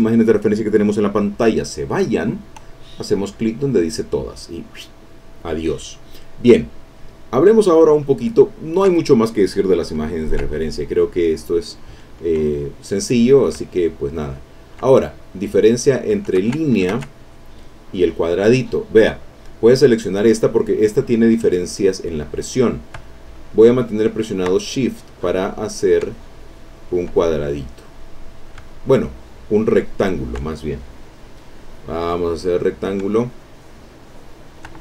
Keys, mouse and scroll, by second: 3.4-4.5 drag, 6.9 click, 7.5 middle click, 8.5 ctrl+middle click, 10.1 ctrl+middle click, 13.1-14.9 drag, 15.7 click, 16.4 ctrl+z, 19.0-20.7 drag, 22.7-24.6 drag, 25.7-27.2 drag, 28.3-30.5 shift+drag, 31.9 click, 32.8-34.8 shift+drag.